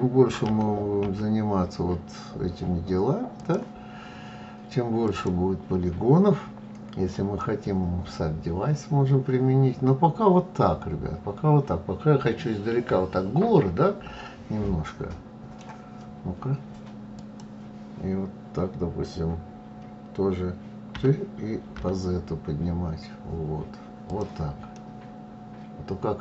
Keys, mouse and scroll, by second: 4.4 click, 6.8-9.8 middle drag, 16.6 click, 24.1-26.2 middle drag.